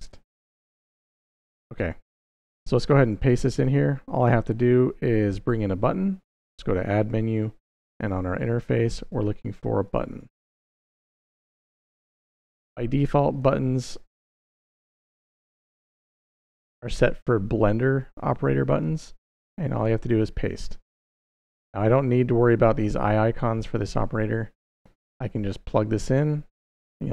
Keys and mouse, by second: 2.8 click, 6.3-11.0 drag, 11.7-12.6 drag, 13.1 click, 14.6 shift+KP_6, 14.8 shift+KP_6, 19.6 click, 25.6-26.5 drag.